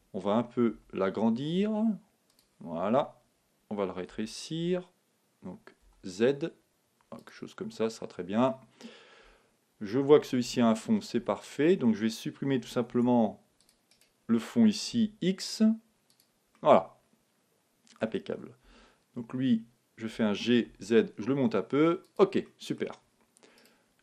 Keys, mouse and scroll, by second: 0.7 s, 2.4-4.3 drag, 4.1 s, 7.3-8.9 drag, 7.9-9.6 middle drag, 10.4 Tab, 11.1 Tab, 12.9 ctrl+Tab, 14.0-15.7 right drag, 15.0 x, 16.5-18.3 middle drag, 18.7 Tab, 20.2 g, 22.1-24.0 drag, 22.5-24.0 middle drag, 23.5 right click.